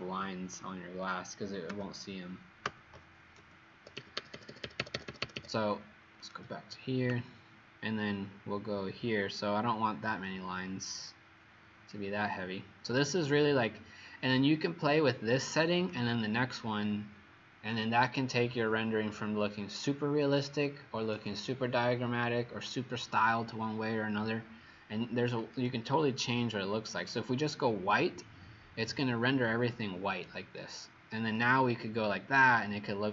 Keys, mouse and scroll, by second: 3.7 Escape, 3.9 Escape, 4.1 Escape, 4.3 Escape, 4.5 Escape, 4.6 Escape, 4.7 Escape, 4.9 Escape, 5.0 Escape, 5.2 Escape, 5.3 Escape, 6.3 click.